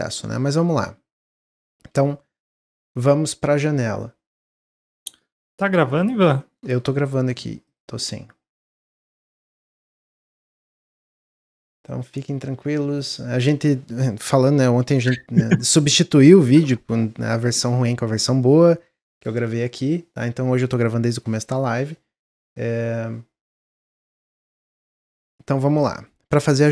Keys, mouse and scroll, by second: 0.3 middle click, 0.7-1.1 scroll down 1, 1.5-4.6 shift+middle drag, 25.9-26.7 middle drag.